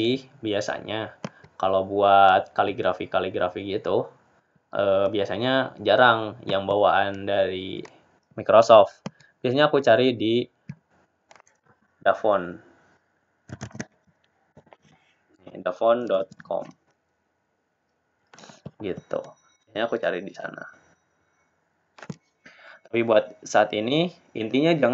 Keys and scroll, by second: 18.5 typing.